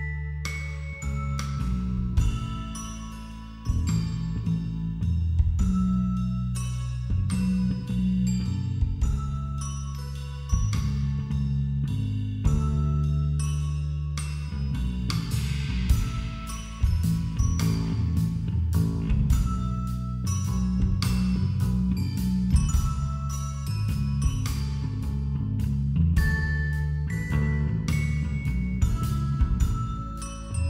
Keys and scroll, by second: 1.4 [, 5.2 ctrl+-, 5.5 space, 5.9 ctrl+=, 6.6 space, 7.6 [.